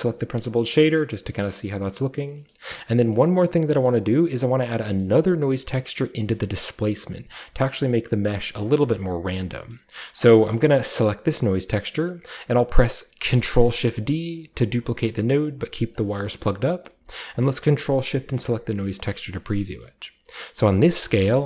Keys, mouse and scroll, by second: 0.0-1.5 ctrl+shift+drag, 1.5 middle click, 1.5-2.2 scroll down 1, 2.2-3.1 scroll down 1, 2.5 middle click, 3.1-4.5 scroll down 1, 3.4 middle click, 3.9 middle click, 4.5-5.0 scroll down 1, 4.9 middle click, 5.5 middle click, 5.5-8.4 scroll up 1, 6.2 middle drag, 8.9-9.5 scroll down 5, 9.7-11.3 middle drag, 9.9-10.2 scroll up 2, 10.2 click, 10.5-11.1 scroll up 2, 11.1 click, 11.3-13.2 scroll up 1, 13.2-13.5 scroll up 1, 13.3 shift+d, 15.9 click, 16.3-17.3 scroll up 1, 17.3 ctrl+shift+click, 18.0-18.9 scroll up 1, 19.0-20.2 scroll up 2, 20.2-20.8 scroll up 1, 20.8-21.4 drag.